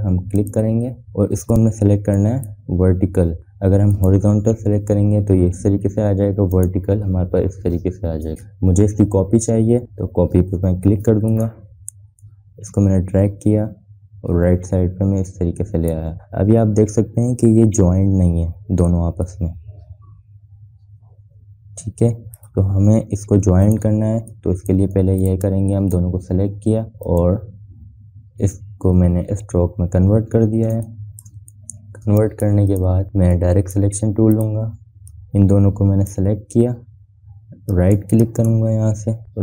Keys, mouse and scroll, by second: 1.0 click, 2.8 click, 7.2 click, 12.0-16.8 drag, 18.1 scroll up 1, 20.2-23.0 shift+drag, 23.6 ctrl+z, 24.3 click, 25.3 ctrl+drag, 25.7 ctrl+z, 30.9 scroll up 1, 31.4 space, 31.6 click, 32.0 space, 32.1 scroll up 1, 32.7 space, 32.9-34.6 drag, 39.0 right click.